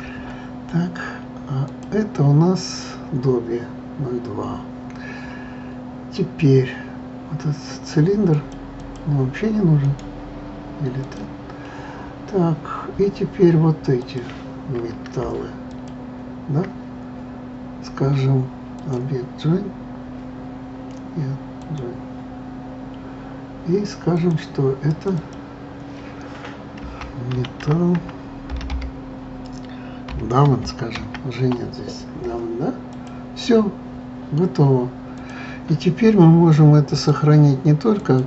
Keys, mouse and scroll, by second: 1.6 click, 8.3 click, 8.8 click, 9.8-14.0 right drag, 14.0 click, 15.7 shift+click, 18.8-22.1 drag, 24.1 click, 24.9 click, 25.1-28.2 drag, 35.1 click, 36.9-38.2 drag.